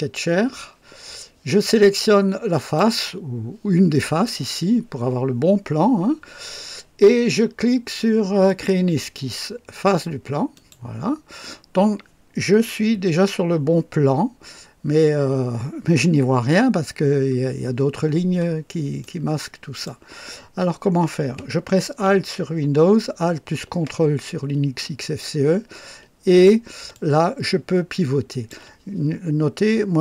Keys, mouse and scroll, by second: 2.5 click, 8.4 click, 10.5 click, 16.8-17.1 scroll up 2, 18.0-18.4 scroll down 2, 19.0-20.0 right drag, 25.0-26.6 ctrl+alt+drag, 26.9-28.6 ctrl+alt+drag.